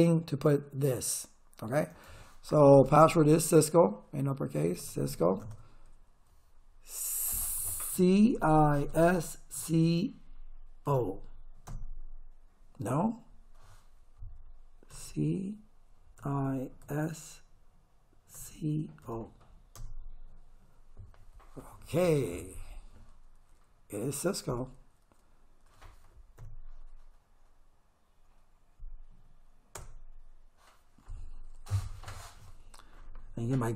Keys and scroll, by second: 4.4-5.7 typing, 7.9 c, 8.4 i, 8.9 s, 9.6 c, 10.9 o, 11.7 Return, 14.9 c, 16.2 i, 16.8 s, 18.4 c, 19.0 o, 19.8 Return, 26.4 Up, 29.8 Return.